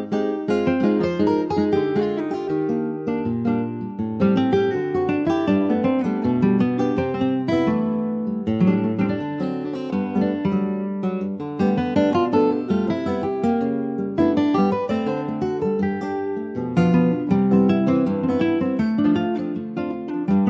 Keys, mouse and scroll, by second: 3.0-4.0 right drag, 4.1 click, 4.4 scroll down 3, 4.7 middle click, 4.9-5.3 scroll down 2, 5.3 middle click, 5.8 ctrl+s, 7.3 click, 7.7 click, 8.8-10.1 drag, 11.4 click, 11.9 click, 12.3 scroll up 3, 12.7-15.8 middle drag, 15.8 scroll down 2, 16.1 shift+middle click, 16.6-17.2 scroll up 2, 17.5 ctrl+s, 17.8 click.